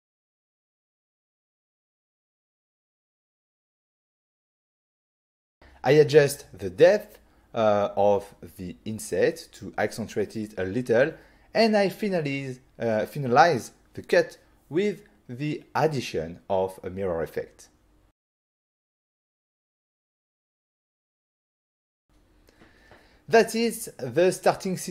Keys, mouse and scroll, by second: 1.1 shift+click, 1.4 shift+click, 1.6 middle click, 3.5 middle click, 3.9 click, 6.0 click, 6.4 click, 6.8 middle click, 7.4 middle click, 7.8 click, 15.2 click, 17.1 click, 19.6 click, 20.9 click, 23.4 click.